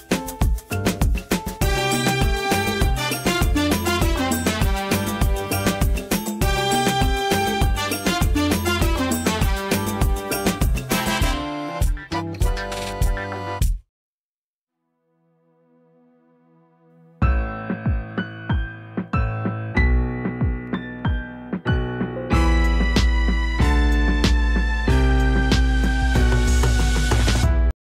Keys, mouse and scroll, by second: 6.8 space, 6.8 right click, 7.0 click, 8.5 space, 8.7 right click, 8.9 click, 9.2 space, 10.2 click, 21.2 space, 21.3 right click, 21.6 click, 21.9 v, 22.7 click, 23.1 v, 23.6 click.